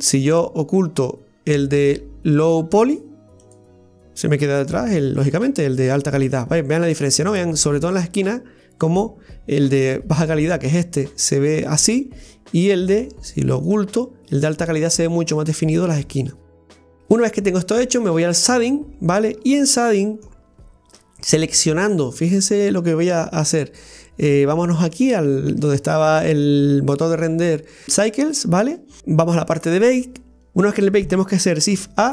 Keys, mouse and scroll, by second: 3.4 click, 4.8 click, 5.2 click, 6.2 click, 6.8 click, 7.2 click, 13.7 click, 17.0 click, 18.5 click.